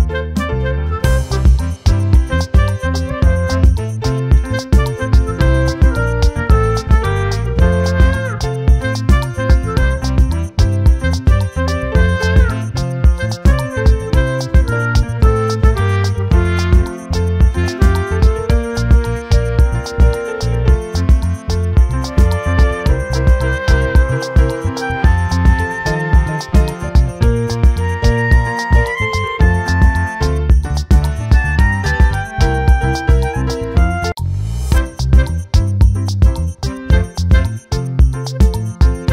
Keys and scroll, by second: 0.8 ctrl+t, 18.8 ctrl+t, 20.3 ctrl+t, 22.2 ctrl+t, 25.0 ctrl+t.